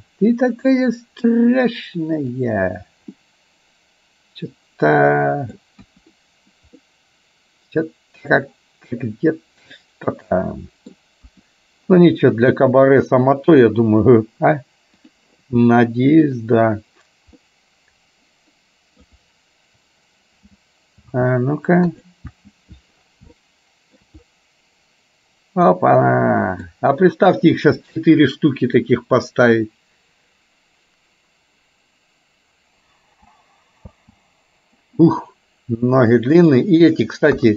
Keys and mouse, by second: 3.2-5.7 middle drag, 5.9 KP_1, 6.9-11.1 middle drag, 11.3 KP_1, 15.1 click, 16.4 click, 17.4-19.2 middle drag, 20.6 b, 22.6 space, 23.7 middle click, 26.1 middle click, 34.1 space, 35.3-36.7 middle drag, 37.4 KP_1.